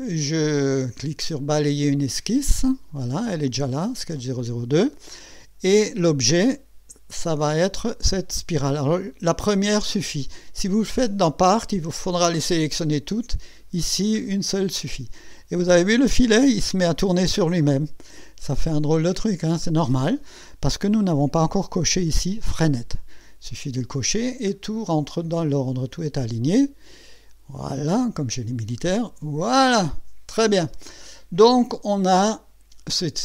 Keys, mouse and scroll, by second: 2.0 click, 7.3 click, 12.1 click, 14.2 scroll up 1, 14.9-15.6 right drag, 16.6 scroll up 1, 18.2-19.7 right drag, 21.3 click, 22.7 click, 24.6-25.0 scroll down 2, 28.7 click, 30.1 scroll down 1, 30.7-33.2 drag.